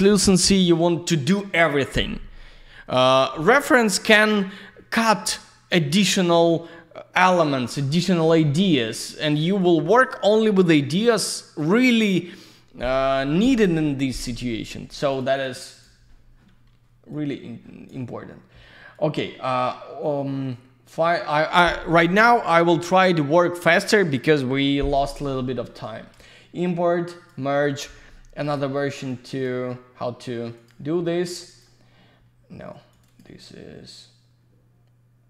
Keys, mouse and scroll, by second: 8.7 ctrl+shift+click, 9.0 ctrl+shift+click, 9.2 ctrl+shift+click, 9.5 ctrl+shift+click, 15.1 ctrl+shift+click, 15.4 ctrl+shift+click, 15.6 ctrl+shift+click, 15.7 ctrl+shift+click, 17.1 ctrl+shift+click, 28.5 ctrl+shift+click, 29.1 ctrl+shift+click, 30.7 ctrl+shift+click, 31.3 ctrl+shift+click, 31.4 ctrl+shift+click, 32.9 ctrl+shift+click.